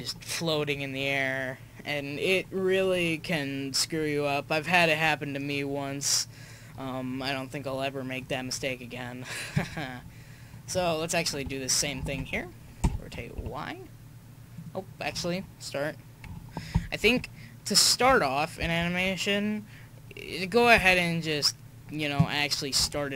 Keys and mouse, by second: 12.8 r, 16.7 u, 17.1 i, 18.1 i, 20.8 i, 22.2-23.1 drag.